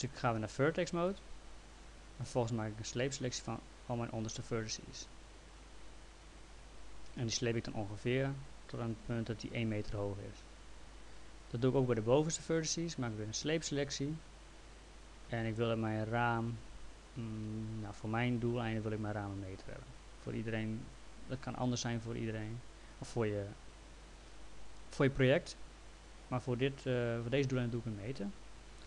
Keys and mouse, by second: 1.1 click, 2.5 click, 7.2 click, 11.6 click, 18.0 click.